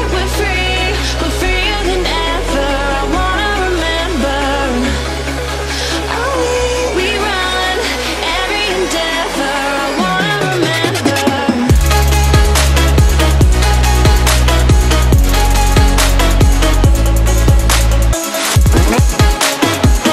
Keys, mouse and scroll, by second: 1.0-5.9 drag, 8.5 ctrl+click, 9.5 click, 11.9 Left, 16.5 click, 17.0 right click, 18.0 click.